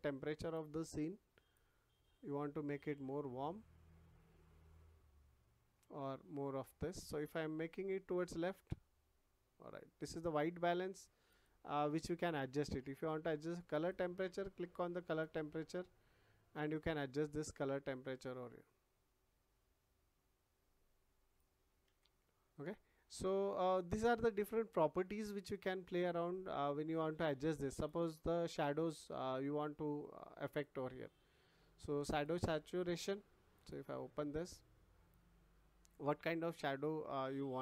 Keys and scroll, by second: 21.8 ctrl+z.